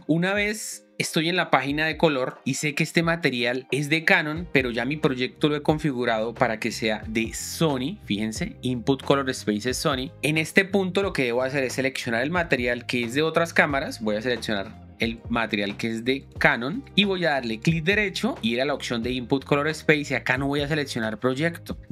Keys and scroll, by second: 7.0 shift+9.